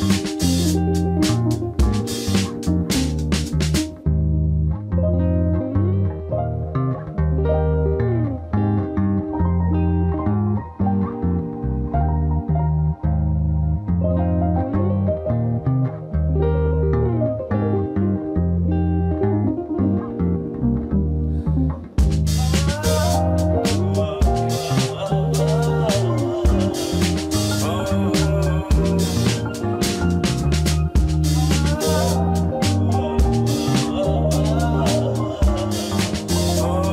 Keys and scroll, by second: 0.0-2.5 typing, 7.9 alt+z, 8.9 shift+a, 10.4 Tab, 10.9 m, 12.9 g, 17.2 e, 18.8 e, 20.7-21.9 typing.